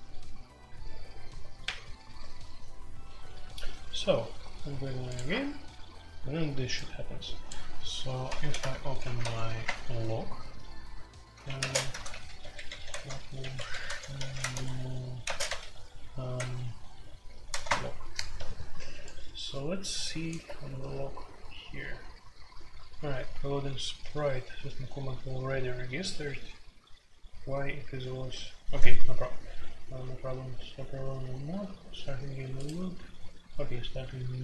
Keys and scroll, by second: 8.4 super+r, 9.0-9.3 typing, 9.6 Return, 11.1-18.0 typing.